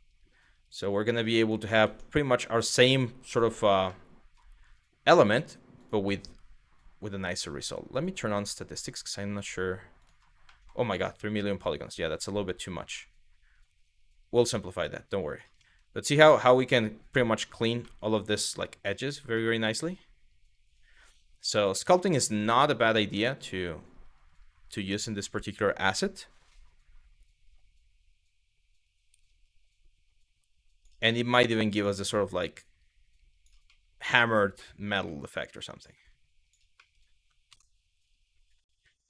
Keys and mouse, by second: 3.6 middle click, 5.4-7.8 drag, 7.9-9.9 drag, 10.2 middle click, 15.6 middle click, 17.5 middle click, 18.1 shift+click, 19.1 middle click, 21.4 shift+middle click, 22.2 middle click, 31.8 middle click, 34.3 middle click, 35.0 shift+click, 36.5 middle click.